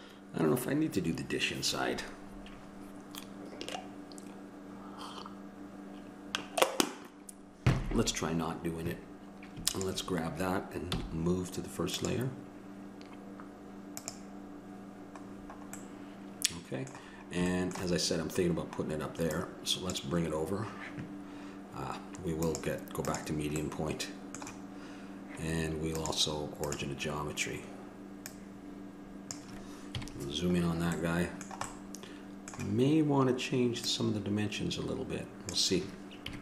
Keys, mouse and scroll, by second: 9.9-12.1 drag, 16.0-20.1 middle drag, 20.1-23.8 drag, 23.8-26.9 middle drag, 26.9-30.2 drag, 30.2 KP_Decimal, 31.3 middle click, 32.4 middle click.